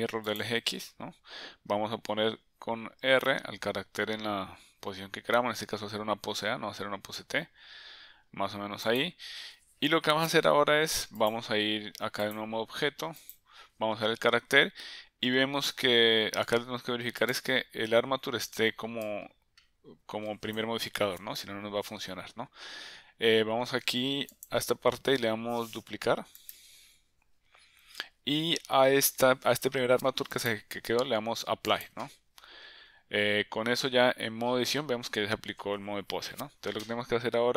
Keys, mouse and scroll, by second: 1.0 drag, 3.0 r, 11.3-12.4 drag, 13.2 click, 17.2 click, 19.0-20.6 drag, 24.3-27.2 drag, 30.4-32.6 drag, 34.0 Tab, 36.2 Tab.